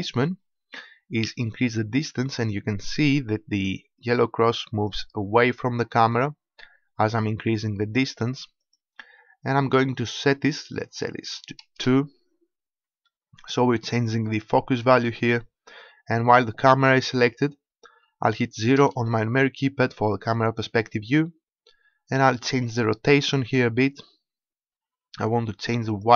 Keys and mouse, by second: 5.6 middle click, 8.6-13.0 drag, 13.2 middle click, 18.8 KP_0, 22.6-26.1 drag.